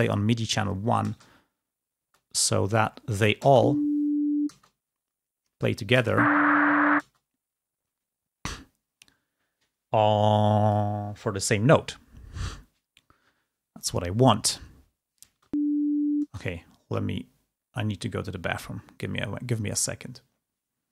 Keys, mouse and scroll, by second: 2.1 space.